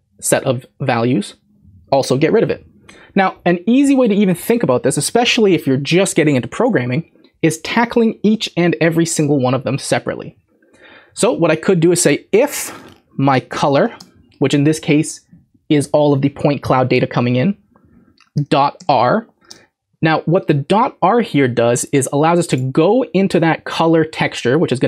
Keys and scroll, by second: 13.1-14.5 typing, 18.1-18.8 typing, 20.0-20.7 typing.